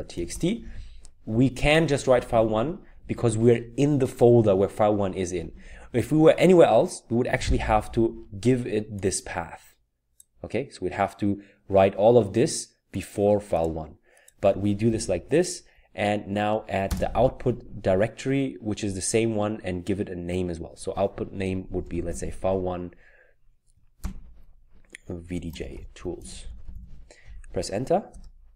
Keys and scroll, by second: 0.0-3.0 typing, 5.3-5.7 typing, 15.0 Right, 15.3-15.7 typing, 21.8-22.4 typing, 24.0 typing, 25.5-26.6 typing, 28.1 Return, 28.1 typing.